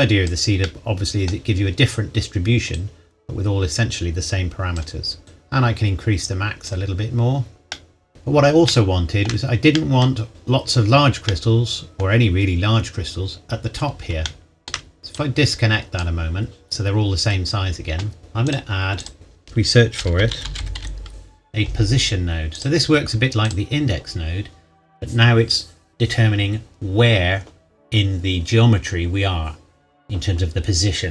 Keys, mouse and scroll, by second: 0.6 middle click, 2.8 click, 7.7 middle click, 8.1-8.6 scroll down 1, 8.6 shift+middle click, 10.0 middle click, 14.6 shift+middle click, 15.0 click, 18.4 click, 20.2-20.8 typing, 22.5 click.